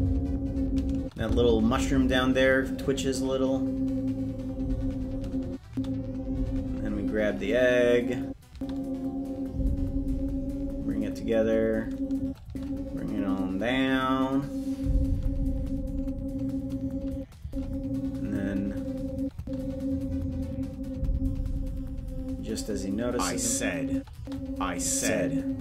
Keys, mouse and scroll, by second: 0.9 space, 1.1 space, 5.4 space, 5.6 space, 8.2 space, 8.4 space, 12.2 space, 12.4 space, 17.1 space, 17.4 space, 19.1 space, 19.3 space, 23.9 space, 24.1 space.